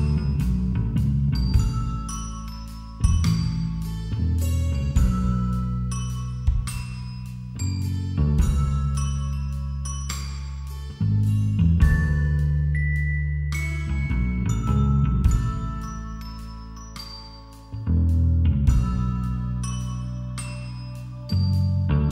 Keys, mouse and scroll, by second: 2.2-3.4 middle drag, 4.3-5.3 drag, 4.3-7.3 middle drag, 5.7 KP_5, 5.9 KP_3, 7.3 e, 11.4 a, 11.8-14.6 middle drag, 12.5 z, 13.1 z, 14.6-15.9 drag, 15.9-18.4 middle drag, 18.0 shift+r, 18.5 a, 19.5 ctrl+r.